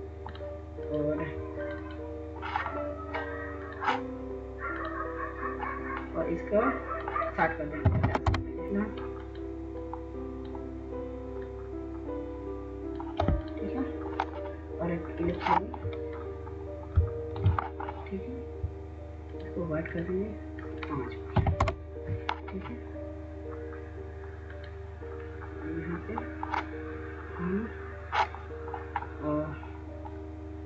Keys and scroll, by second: 7.8 typing, 8.3 Return, 21.2 5, 21.4 Return.